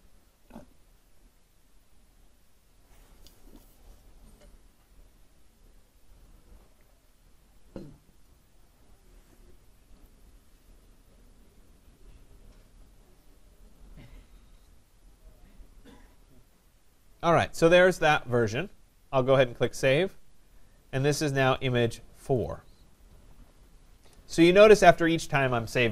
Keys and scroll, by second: 23.6 BackSpace.